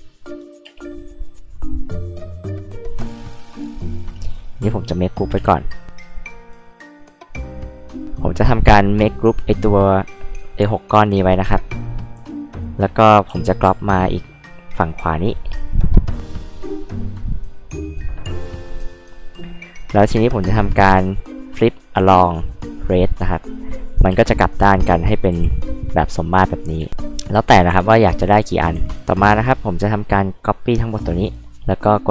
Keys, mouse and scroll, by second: 0.6 space, 3.1 click, 3.2 click, 3.4 click, 3.8 right click, 4.5 scroll up 2, 4.7 click, 5.4 space, 6.2 shift+click, 6.5 shift+click, 6.9 shift+click, 7.2 shift+click, 7.6 shift+click, 9.9 click, 11.6 click, 13.3 m, 13.9 ctrl+click, 15.2 ctrl+drag, 16.1-18.2 drag, 20.1 right click, 23.1 click, 23.7 scroll up 2, 24.0 scroll down 2, 24.1 space, 24.2 click, 25.3 h, 25.5-25.8 drag, 25.5-25.8 right drag, 26.8 space, 26.9 click, 27.4 click, 28.0 click, 28.5 click, 29.0 click, 29.6 click, 29.9 click, 31.1 right click.